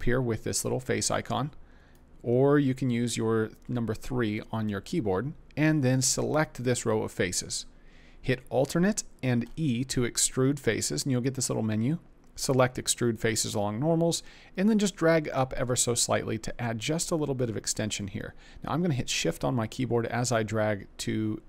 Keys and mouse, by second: 9.3 alt+e.